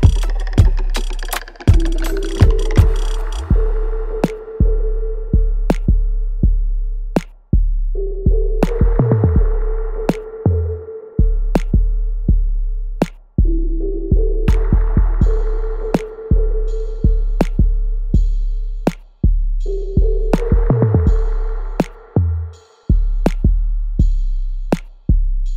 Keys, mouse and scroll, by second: 1.3 click, 9.9 click, 10.1-11.6 alt+right drag, 11.6 click, 18.5 click, 21.9 right click, 23.2 click, 24.3 alt+right click, 24.9 click, 25.1 right click.